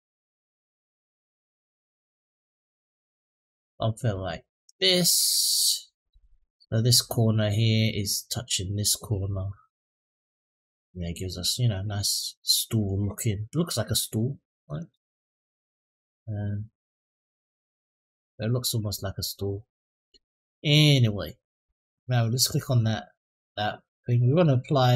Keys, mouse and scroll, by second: 2.2-3.9 drag, 4.5-5.9 drag, 10.0 middle click, 11.9 middle click, 13.2 Tab, 14.0 click, 15.3 click, 16.3 click, 17.1 click, 17.7-21.0 middle drag, 22.6 click.